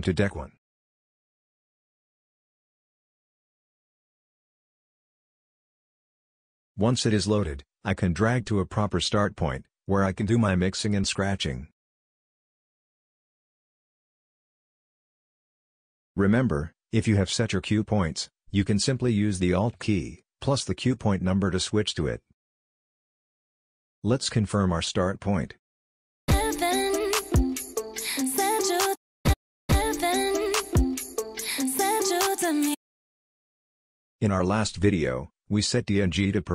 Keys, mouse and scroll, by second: 1.1-3.3 typing, 4.7 click, 7.4 scroll up 2, 8.9 click, 10.2 click, 11.6 click, 20.5 alt+1, 21.5 alt+2, 22.6 alt+1, 23.3 alt+2, 26.3 c, 26.6 space, 29.0 c, 29.2 c, 29.7 c.